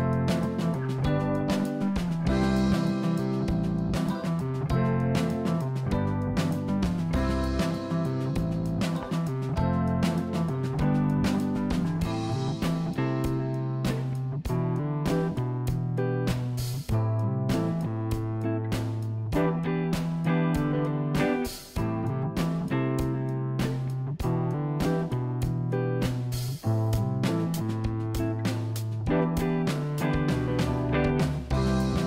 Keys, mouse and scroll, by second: 6.5 e, 13.4 ctrl+z, 14.1 e, 17.9 r.